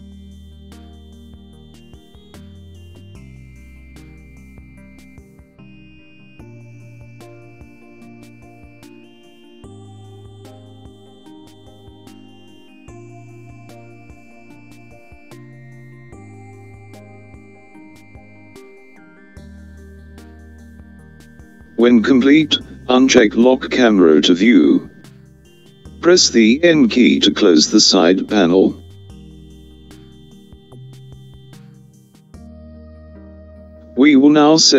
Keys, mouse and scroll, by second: 4.1-6.0 middle drag, 7.3-9.0 scroll down 1, 9.0 middle click, 10.2-12.8 middle drag, 13.4-15.5 scroll up 1, 15.5-19.2 middle drag, 28.7 click, 33.6 n.